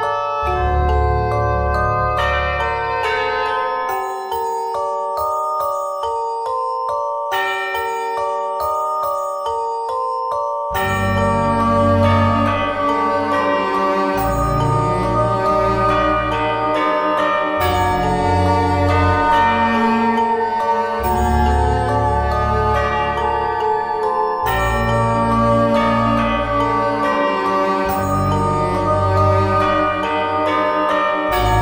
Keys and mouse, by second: 7.7 e, 9.5 click, 15.7 g, 16.3-17.4 drag, 17.8-19.6 drag, 19.6 e, 23.5 e, 25.6 z, 26.1 middle click, 28.2 middle click, 28.7-30.6 drag, 30.6 middle click.